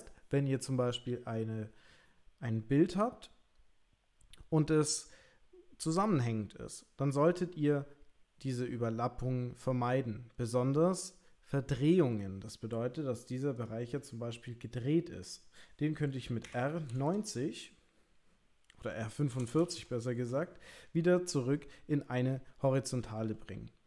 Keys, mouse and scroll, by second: 13.6 click, 13.9 l, 16.6 r.